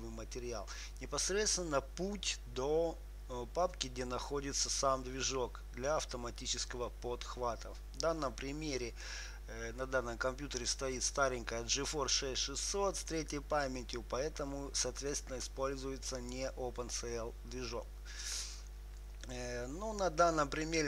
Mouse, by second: 2.8-15.8 drag, 16.7-20.8 drag.